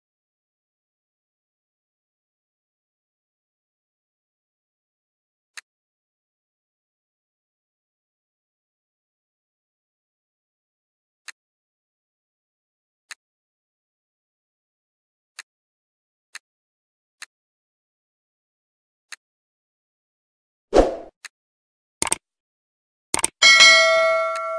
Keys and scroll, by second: 3.0 ctrl+d.